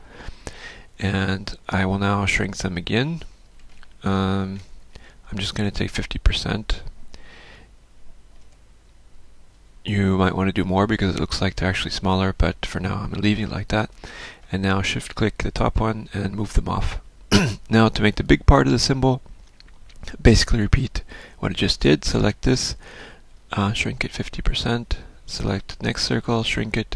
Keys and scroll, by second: 6.7 ctrl+shift+m, 10.7 F1.